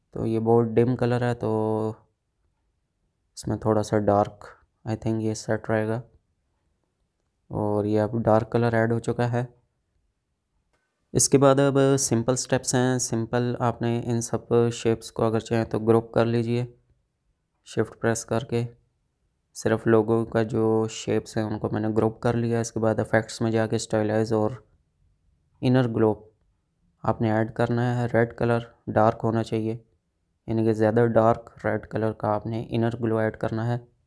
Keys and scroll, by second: 1.5 ctrl+z, 13.2 space, 18.6 ctrl+g.